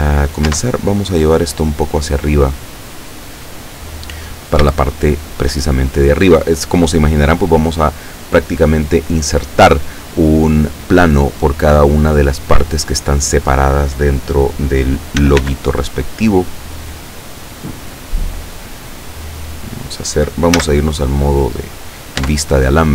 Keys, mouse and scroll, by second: 0.6 Tab, 0.8 scroll up 1, 1.6-4.0 drag, 4.8-5.6 shift+middle drag, 15.2 s, 15.4 x, 19.9 click, 20.7 z, 22.3 Tab.